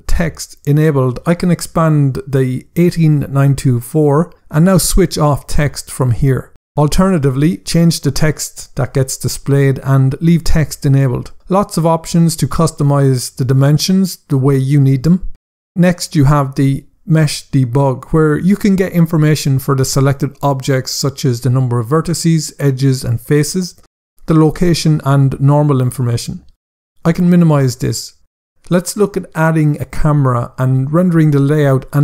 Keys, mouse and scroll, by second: 0.9 click, 5.2 click, 11.8 click, 17.5 click, 20.2 click, 21.9 double click, 22.6 click, 23.0 double click, 27.0 click, 29.5 Tab.